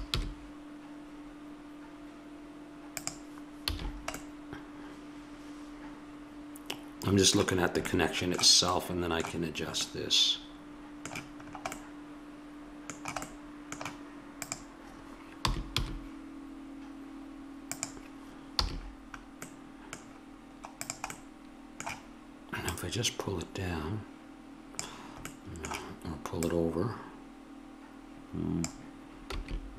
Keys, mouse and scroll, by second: 3.7 a, 3.8-6.0 middle drag, 7.6-12.6 middle drag, 14.5 click, 15.4 r, 18.6 a, 20.8-22.6 drag, 22.6-24.4 drag, 25.3-26.4 middle drag, 26.4-28.3 drag, 29.3 s.